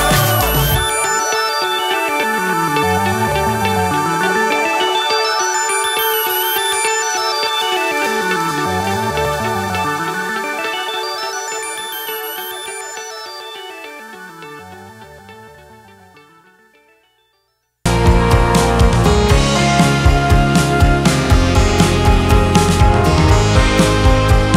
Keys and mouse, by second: 2.0-4.3 drag, 4.4-5.4 drag, 7.7 click, 9.8-11.5 drag, 13.4-15.7 drag, 16.5-19.6 drag, 21.0-22.9 drag, 23.6-24.5 drag.